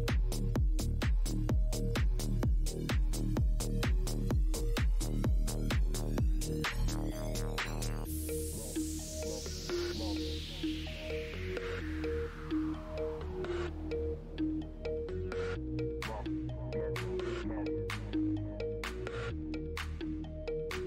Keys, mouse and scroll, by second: 2.4 click, 2.5 Tab, 4.5 click, 4.7 Tab, 6.2 click, 6.2 Tab, 7.4 click, 7.6 Tab, 16.7 click, 18.5 click, 18.7 ctrl+Tab, 20.1 click.